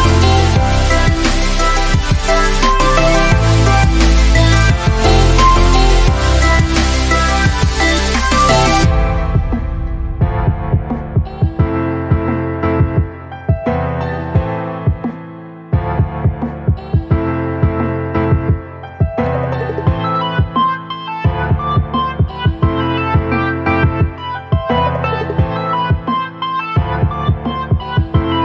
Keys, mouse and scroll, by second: 3.3-3.9 drag, 15.4 typing, 18.5-19.4 click, 21.4 click.